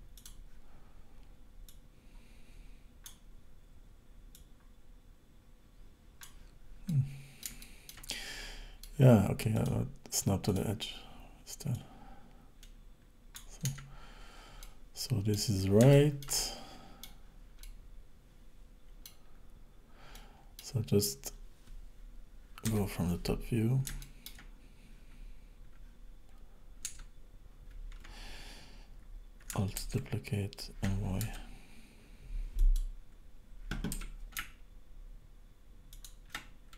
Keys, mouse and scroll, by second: 0.2 click, 1.7 click, 4.4 click, 6.9 middle click, 8.1 middle click, 9.6 click, 11.8 click, 13.7 Tab, 14.1-14.7 scroll down 4, 14.7 middle click, 15.9 shift+middle click, 16.4 middle click, 17.3-17.7 scroll down 2, 17.7 middle click, 19.4-20.2 scroll up 3, 20.2 middle click, 20.8 scroll down 3, 22.7 KP_7, 23.1 scroll down 2, 23.6 scroll up 3, 24.0 shift+middle click, 26.9 Tab, 29.9 alt+d, 33.9 r, 36.5 scroll up 4.